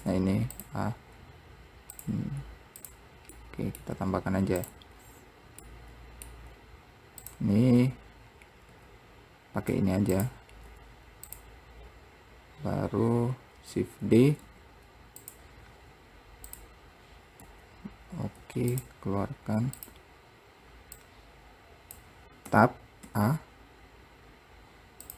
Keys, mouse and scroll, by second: 0.2 Tab, 0.7 click, 2.1 click, 2.9 click, 3.6 middle click, 4.1 `, 5.1-5.8 scroll down 2, 5.8 middle click, 6.7-7.4 scroll down 2, 7.4 click, 9.9 Tab, 10.3 click, 13.3-14.3 scroll down 2, 14.3 shift+d, 18.6 click, 19.9 click, 21.1 click, 22.6 Tab.